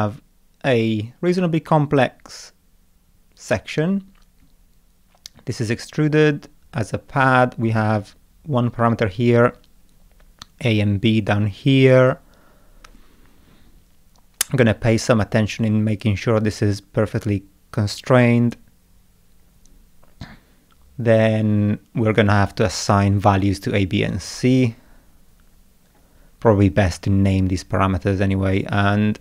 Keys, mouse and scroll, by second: 19.0 scroll down 1, 26.2 scroll up 1.